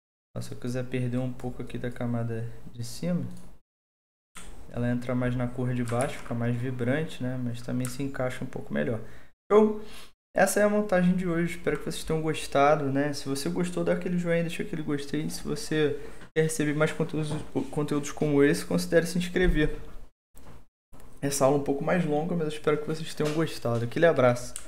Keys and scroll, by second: 6.0 ctrl+s.